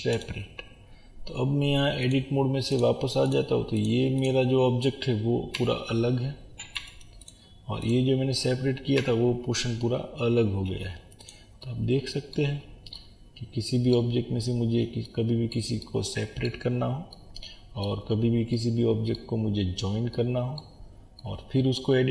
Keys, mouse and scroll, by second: 0.3-5.7 drag, 5.7 g, 7.9 click, 9.0 g, 11.7-22.1 middle drag, 12.5-13.0 scroll down 1, 16.7-17.1 scroll up 1, 18.1-18.5 scroll down 1, 19.4 scroll up 1, 20.8 scroll down 1, 22.0 scroll up 1.